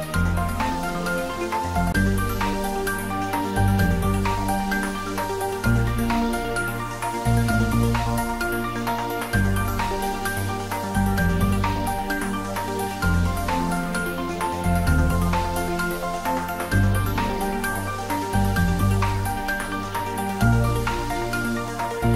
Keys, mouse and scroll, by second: 0.8 click, 2.3 scroll up 1, 2.7-9.3 middle drag, 9.7 scroll up 1, 12.3 click, 13.4 s, 15.5 click, 16.6 click, 21.4 g, 21.7 Right.